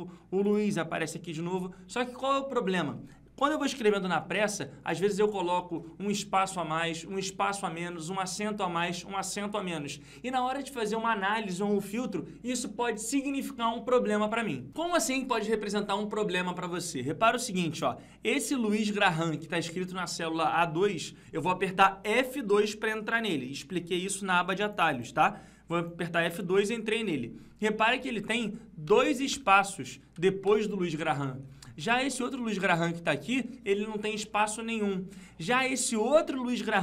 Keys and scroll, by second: 26.9 F2, 33.1 F2.